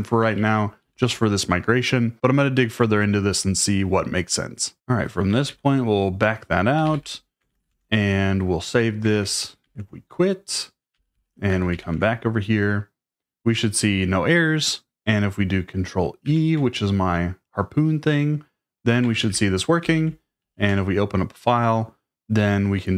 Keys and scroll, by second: 0.2 j, 0.8 k, 5.3 d, 6.5-13.8 typing, 16.2 ctrl+e, 19.2 ctrl+e, 19.8-21.1 typing.